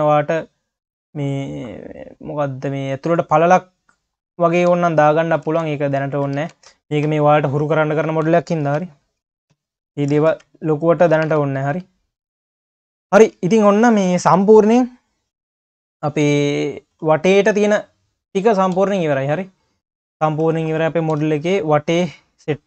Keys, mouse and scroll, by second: 0.0-2.2 drag, 2.2-3.1 scroll up 5, 3.1 click, 3.8-4.3 scroll down 2, 4.3 click, 4.6 ctrl+s, 5.1 click, 5.6 ctrl+s, 5.9 scroll down 4, 6.1 q, 6.5 ctrl+s, 6.6 scroll down 3, 6.7 q, 7.3-7.8 scroll down 1, 7.9 drag, 8.7 ctrl+c, 9.2 shift+c, 10.3 shift+c, 11.3 ctrl+s, 11.8 scroll down 1, 11.9 q, 12.4 scroll up 4, 12.6 q, 13.3 q, 17.3 q, 18.8 q, 21.1 KP_3.